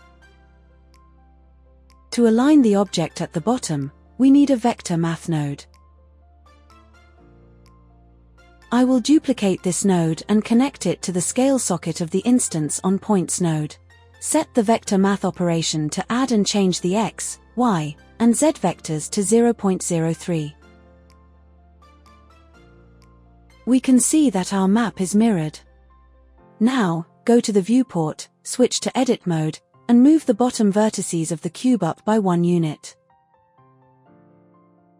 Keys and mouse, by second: 3.4 click, 7.3 click, 9.0 drag, 12.7 shift+d, 13.4-14.8 drag, 15.8-17.2 drag, 17.8-19.5 drag, 23.3 shift+middle click, 27.3 Tab, 28.3 alt+z, 28.5 click, 29.5 g, 30.0 z, 30.4 KP_1, 30.6 KP_Enter, 31.0 Tab, 33.5 Tab, 34.3 a.